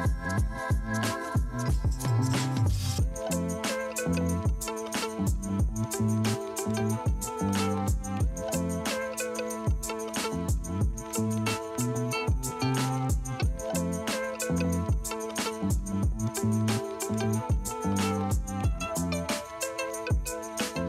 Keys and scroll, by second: 0.0 space, 0.5 space, 1.9 ], 3.2 ctrl+alt+z, 3.9 [, 13.1 ], 16.5 space, 18.3 space, 19.7 F9, 20.6 space.